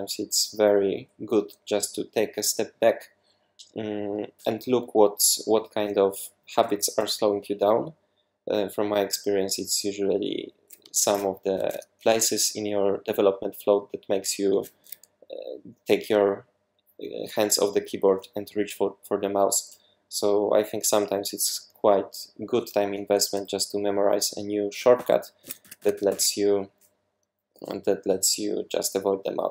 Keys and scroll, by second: 11.0 super+1, 11.6 super+2, 24.8-26.3 typing, 28.1 k.